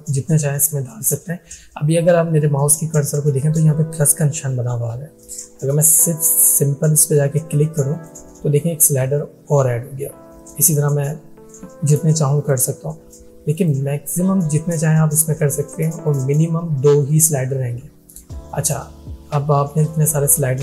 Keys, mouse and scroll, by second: 7.9 click, 12.4 click.